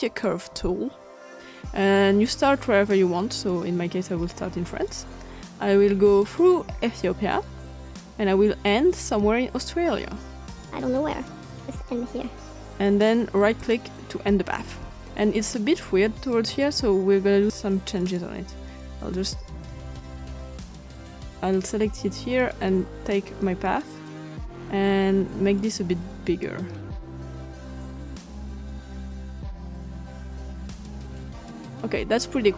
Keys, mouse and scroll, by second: 1.2 click, 3.4-4.9 drag, 6.7-8.0 drag, 8.6 click, 11.4 click, 13.5 right click, 18.2-19.5 ctrl+scroll up 2, 19.3 click, 19.7 ctrl+z, 20.9 click, 22.3-23.6 drag, 23.8-24.8 drag, 26.2-27.3 drag, 27.6 click, 29.3 click, 30.2 click, 31.3 click.